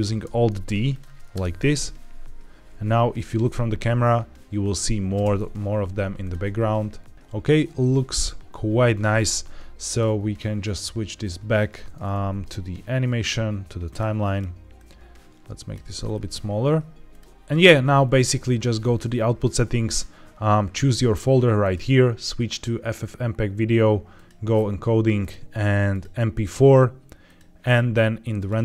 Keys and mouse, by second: 0.1 alt+d, 0.8 click, 1.2 KP_0, 5.1 space, 6.1 click, 7.1 ctrl+s, 9.8-13.9 drag, 14.7 click, 17.0 click, 21.6 click, 24.1 click, 25.1-25.9 drag, 27.1-27.5 drag.